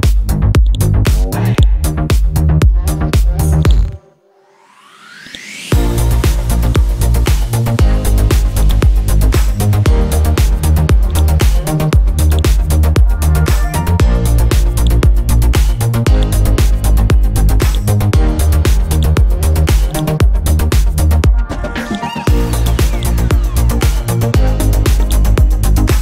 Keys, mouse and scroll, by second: 1.7-2.8 drag, 3.1 Delete, 3.6 click, 6.6 right click, 9.7-11.0 typing, 11.1 click, 13.1-14.8 scroll up 1, 14.8-21.0 drag, 21.8 right click, 22.6 click, 25.0-26.0 right drag.